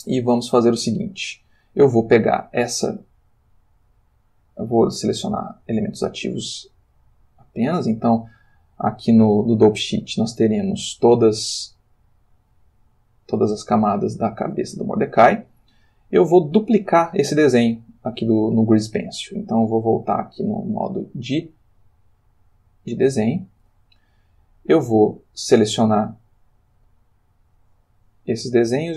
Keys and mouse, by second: 2.2-4.0 middle drag, 5.5 click, 6.9 middle click, 10.5 click, 11.1-11.6 drag, 16.4-17.0 drag, 19.5 click, 22.9 click, 27.6-28.9 drag.